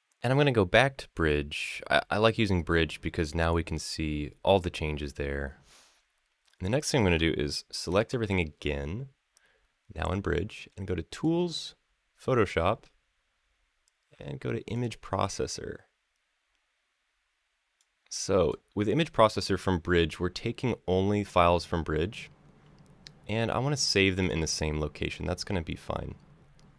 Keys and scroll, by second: 3.6 Left, 3.8 Left, 4.1 Right, 4.3 Left, 4.6 Left, 4.7 Left, 4.8 Left, 5.0 Left, 7.6 ctrl+a.